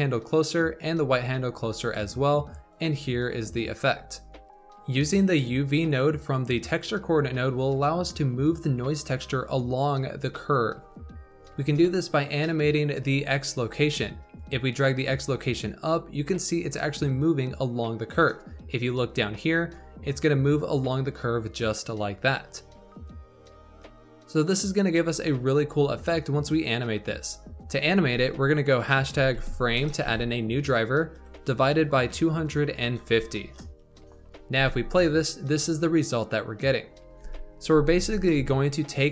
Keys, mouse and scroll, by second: 3.4-4.5 scroll up 6, 4.5-9.8 middle drag, 9.8-10.4 scroll down 4, 11.2-12.3 scroll up 3, 12.3-14.3 middle drag, 14.3-17.3 shift+drag, 19.6-22.7 drag, 27.1-30.3 drag, 34.5 space, 37.2 space, 37.7 space.